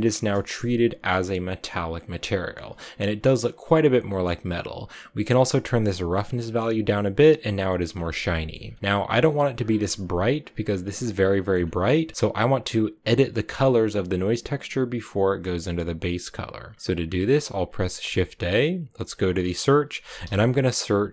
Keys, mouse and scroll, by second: 5.1-7.8 drag, 7.8-8.1 scroll down 4, 8.1 middle click, 8.5-9.2 scroll down 3, 9.2-11.2 drag, 11.2-12.2 scroll up 3, 11.2 middle click, 12.2-15.2 drag, 15.5-17.7 middle drag, 17.7 shift+a.